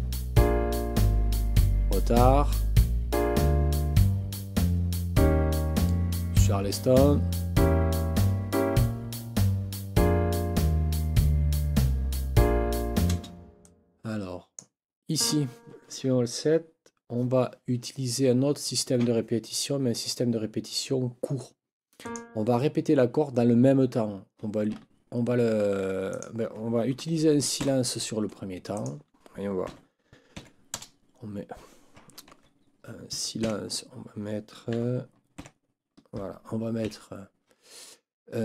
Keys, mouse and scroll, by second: 13.1 space, 13.6 click, 15.2 click, 22.0 click, 26.1 click, 27.6 Delete, 28.7 click, 29.6 n, 30.4 KP_4, 30.7 KP_0, 32.3 ctrl+z, 33.4 KP_5, 34.7 n, 36.8 Right.